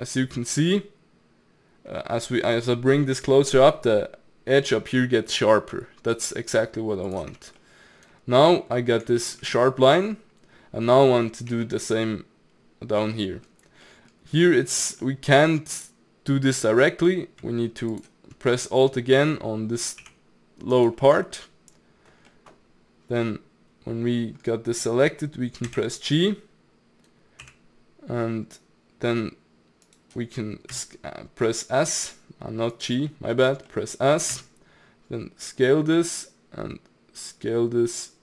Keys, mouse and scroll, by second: 7.3 Tab, 7.6-8.7 middle drag, 8.7-9.2 scroll up 2, 9.2-11.5 shift+middle drag, 11.5 Tab, 13.2-17.9 middle drag, 17.9 alt+click, 18.5-18.9 middle drag, 18.9-20.0 scroll down 1, 20.0 g, 21.0-25.4 middle drag, 25.6 g, 30.7 s, 33.1-34.3 middle drag, 34.3 s.